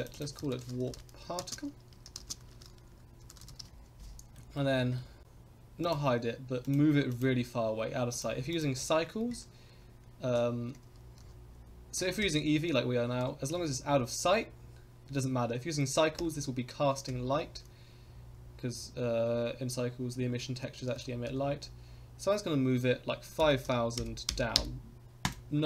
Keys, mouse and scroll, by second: 0.1-4.1 shift+drag, 4.3 middle drag, 4.6 scroll down 2, 4.9 middle click, 5.2 h, 5.2 g, 5.8 click, 6.6 click, 7.1 click, 8.1 click, 8.5 click, 10.8 g, 12.2 KP_0, 13.2 g, 17.0 KP_0, 18.0 scroll up 4, 18.7 scroll down 2, 20.9 g.